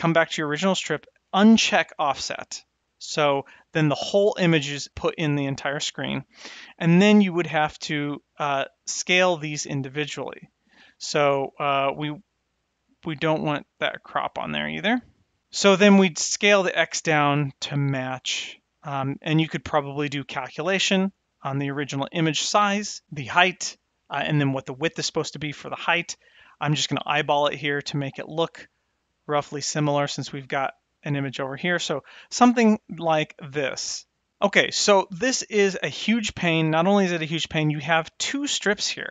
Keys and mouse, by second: 1.6 click, 5.6 click, 8.9 click, 14.1 click, 15.8-18.9 drag, 28.9-30.1 shift+drag, 32.3 click, 33.3-35.4 drag, 38.1 click, 38.4 click, 38.8 click.